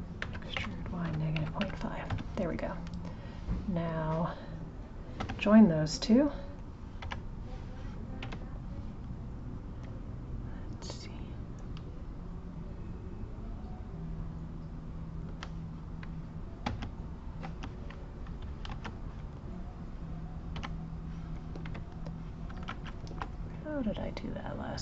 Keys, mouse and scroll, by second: 3.4 click, 5.9 click, 6.6 click, 7.0 g, 9.8 click, 11.0 click, 12.6 click, 14.8 click, 16.7 j, 19.2 click, 19.7 click, 20.6 g, 21.7 Escape, 22.7 ctrl+z, 23.7 click.